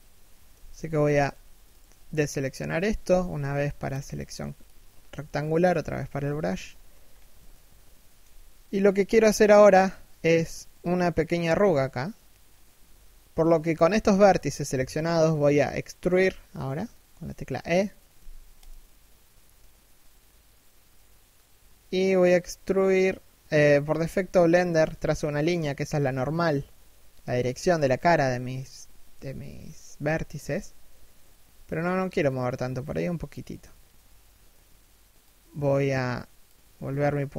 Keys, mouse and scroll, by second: 0.3 b, 2.6 b, 5.9 alt+shift+middle click, 6.3 scroll up 1, 6.9 alt+shift+middle click, 8.2-8.7 scroll up 1, 17.5 e.